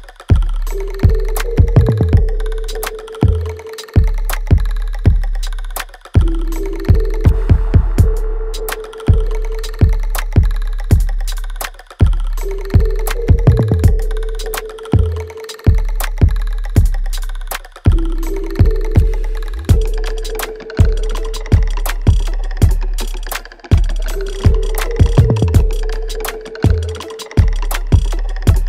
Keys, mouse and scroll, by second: 0.8 alt+middle click, 1.4-6.4 alt+drag, 6.7 right click, 7.1 alt+click, 7.6 alt+middle click, 8.2 click, 8.5 alt+click, 9.7 ctrl+s, 10.6 alt+right click, 11.1-15.7 alt+drag, 18.1 alt+right click, 18.5 alt+middle click, 19.8 ctrl+b, 22.1 right click, 23.5 click, 24.5-26.0 right drag, 26.0 click, 27.7-28.6 ctrl+drag.